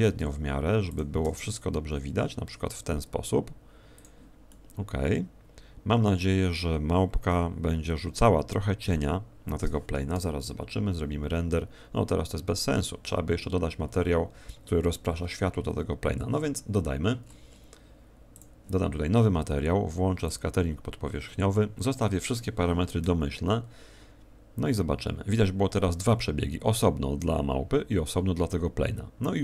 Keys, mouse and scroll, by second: 0.1 r, 0.9 click, 1.2 g, 4.0 click, 4.4 middle click, 7.3 g, 8.9 click, 15.2 Escape, 17.2-18.3 scroll up 3, 18.3 click, 18.3-19.1 scroll up 5, 20.2 click.